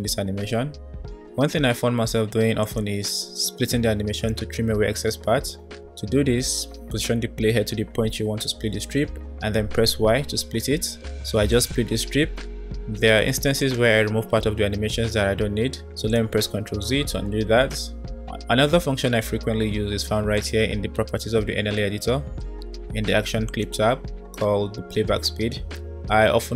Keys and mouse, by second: 4.3-7.7 drag, 9.1 y, 11.4 click, 13.2 Delete, 15.8 ctrl+z, 16.5 ctrl+z, 17.5 ctrl+z, 20.3 click, 23.5 click.